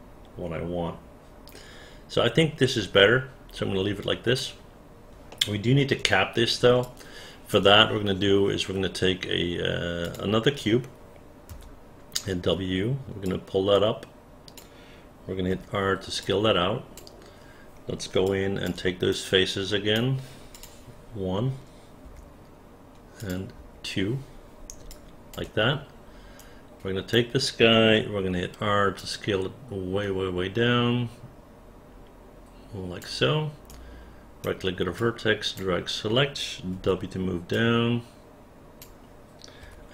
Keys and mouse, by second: 5.3 alt+middle click, 6.8 alt+click, 13.3-14.5 drag, 15.5 r, 16.2 click, 18.3 alt+click, 19.1 right click, 20.5 click, 22.1 Delete, 23.6 Delete, 24.9 alt+click, 26.4 right click, 29.0-33.0 drag, 33.6 right click, 35.0 click, 36.7 w.